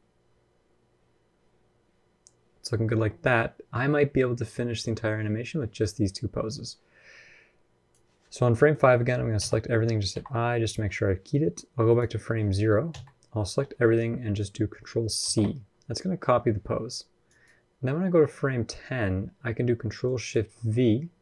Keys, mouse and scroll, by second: 8.1-8.5 scroll down 5, 8.3 middle click, 8.5-9.1 scroll up 2, 8.7 middle click, 9.1 a, 9.9 i, 11.6 click, 12.7 a, 15.0 ctrl+c.